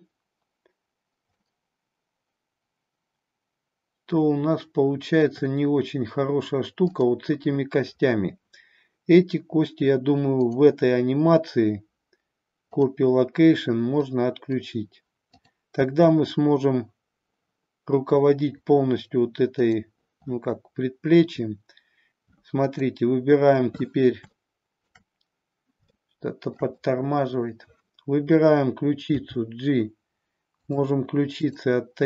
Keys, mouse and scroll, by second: 1.3-5.2 middle drag, 5.2 scroll down 1, 6.8-9.0 drag, 10.3 click, 12.5-12.9 drag, 13.9-14.5 middle drag, 15.4-18.0 drag, 19.4 click, 22.7-25.2 drag, 25.9-26.5 shift+middle drag, 26.7-27.4 middle drag, 29.1 g, 30.6 click, 31.3 click.